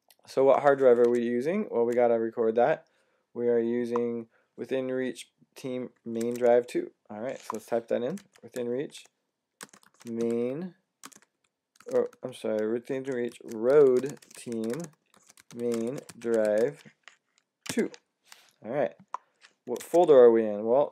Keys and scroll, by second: 0.9 Tab, 6.0 Tab, 9.2-17.5 typing, 19.5-20.3 typing.